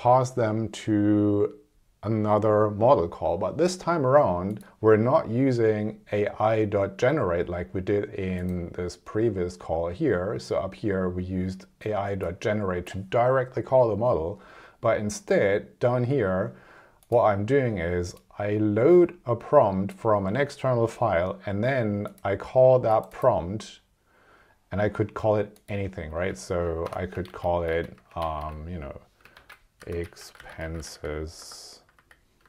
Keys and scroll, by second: 26.1 `, 26.9 BackSpace, 27.2 alt+Right, 27.7 alt+Left, 28.3 alt+Right, 29.3 alt+Left, 31.3 BackSpace, 32.1 s.